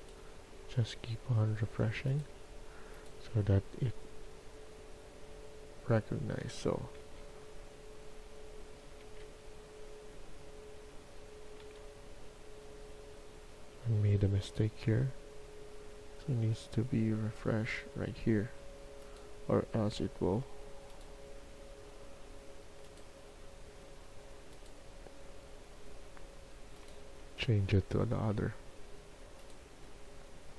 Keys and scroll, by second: 7.0 ctrl+z, 9.0 ctrl+z, 11.5 ctrl+z.